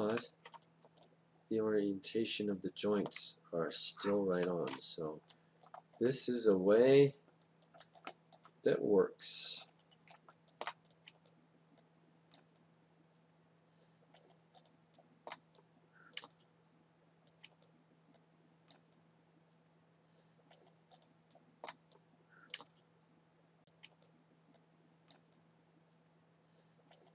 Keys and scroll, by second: 0.1 F8, 4.3 F8, 17.2 F8, 22.0 F8.